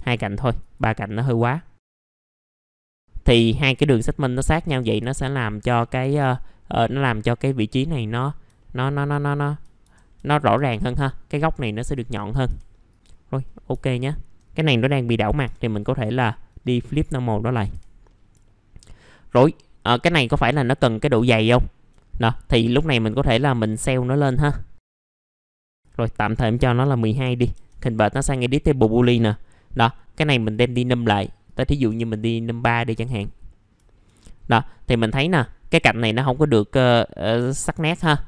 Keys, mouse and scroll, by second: 1.2-1.9 scroll up 1, 1.9 alt+x, 2.4 click, 4.3 middle click, 4.3 scroll down 1, 5.4 middle click, 5.6-6.0 scroll down 1, 7.6 middle click, 7.8 scroll down 1, 8.6 alt+middle click, 9.2-9.6 scroll up 1, 10.2 alt+middle click, 11.0-11.3 scroll up 1, 11.8-12.4 scroll up 1, 12.4 F4, 12.9 click, 13.3 middle click, 13.4 scroll down 1, 13.8 alt+middle click, 15.6 click, 16.5 right click, 17.3 click, 18.0 middle click, 18.1 scroll down 1, 18.4 alt+middle click, 19.1-21.5 scroll down 1, 21.5 alt+middle click, 22.0-23.2 scroll up 1, 23.2 click, 24.8 middle click, 24.8 F4, 24.9-25.4 scroll up 1, 25.4 click, 28.1 middle click, 28.7-30.3 scroll up 1, 30.3 click, 32.1 middle click, 32.7 alt+middle click, 33.9 alt+middle click, 34.4-34.8 scroll up 1, 34.8 middle click, 34.9-35.2 scroll down 1, 35.3 alt+middle click, 37.8 alt+middle click.